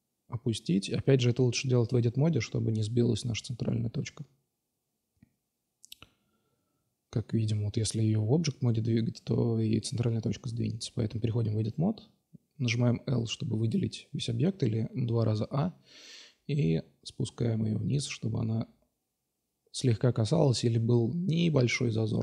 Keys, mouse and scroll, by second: 1.1-2.4 drag, 3.3 g, 5.9 middle click, 6.1 click, 6.3-7.7 middle drag, 10.7 Tab, 11.7 a, 11.8 a, 13.6 q, 15.2 middle drag, 16.1-17.1 drag, 18.2-18.5 middle drag, 18.6 middle click, 18.8 middle click, 19.2 middle click, 19.4 middle click, 20.2 middle click, 20.4 middle click, 20.6 middle click, 22.1 Tab.